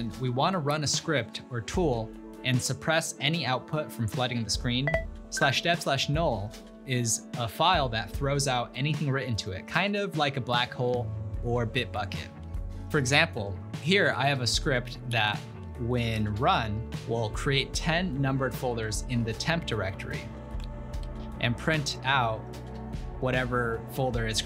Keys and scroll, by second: 14.8-17.1 typing, 19.7-21.8 typing, 21.1 Return.